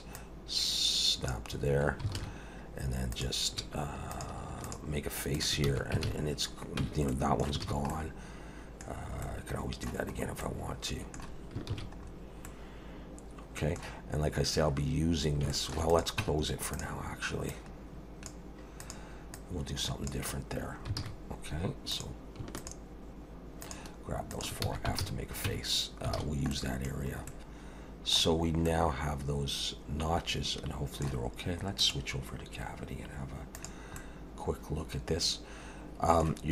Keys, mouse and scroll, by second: 0.1 click, 2.2 alt+a, 3.1 click, 4.1 shift+click, 4.6 shift+click, 5.3 shift+click, 5.7 f, 6.0 alt+a, 6.3-6.8 scroll down 3, 6.8 Tab, 7.1 middle click, 7.6 alt+a, 7.9 middle click, 8.9-9.2 scroll down 3, 9.2 middle click, 10.2-10.6 scroll up 2, 10.4 middle click, 11.7 ctrl+s, 12.0-12.6 scroll up 2, 12.4 middle click, 15.2 scroll up 1, 15.5 shift+middle click, 15.9 click, 16.2 Tab, 16.8 click, 17.5 click, 18.8 click, 19.3 click, 21.0 alt+a, 21.9 click, 22.6 shift+click, 23.6 click, 24.3 click, 24.6 f, 25.0 alt+a, 25.5 Tab, 25.8 scroll down 1, 26.2 alt+a, 26.5 middle click, 27.0-27.3 scroll down 3, 27.3 middle click, 28.4 scroll up 2, 28.7 middle click, 31.8 click, 34.0 middle click.